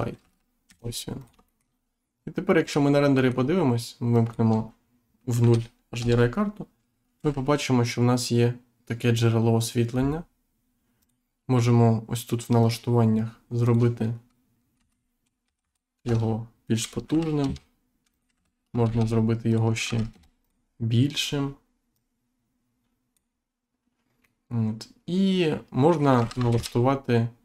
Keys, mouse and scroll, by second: 0.1 g, 0.6 z, 1.4 shift+middle click, 2.6 click, 4.1 click, 5.9 Return, 10.9 click, 12.5 click, 13.6 click, 16.0 Return, 17.4 z, 18.1 click, 18.3 g, 18.8 shift+z, 19.4 click, 19.8 g, 20.4 click, 21.9 click, 24.2 middle click, 26.1 g, 26.4 shift+z.